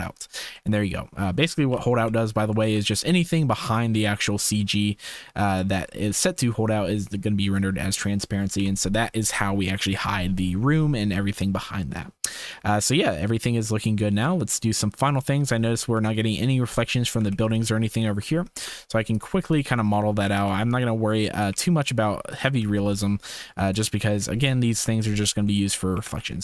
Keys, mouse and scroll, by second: 0.5-1.2 drag, 1.7 KP_0, 2.4 ctrl+s, 3.7-5.7 drag, 6.3-6.9 drag, 7.6 click, 8.5 KP_0, 11.5-15.2 drag, 15.5 shift+middle click, 17.8 ctrl+shift+s, 18.5 shift+a, 20.2 g, 21.5 g, 22.6 s, 25.4 shift+click, 25.9 g.